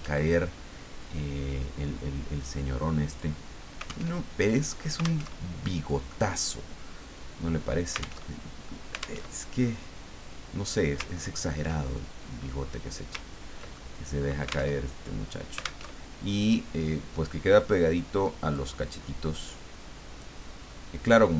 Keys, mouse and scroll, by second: 0.1 alt+Tab, 3.1 click, 4.2 alt+Tab, 5.2 alt+Tab, 8.3 alt+Tab, 9.2 alt+Tab, 11.1-11.5 ctrl+scroll up 2, 12.4-12.7 scroll down 2, 13.3-13.7 ctrl+scroll down 2, 13.7 ctrl+click, 14.8 alt+Tab, 15.8 alt+Tab, 18.5 click, 19.5 click.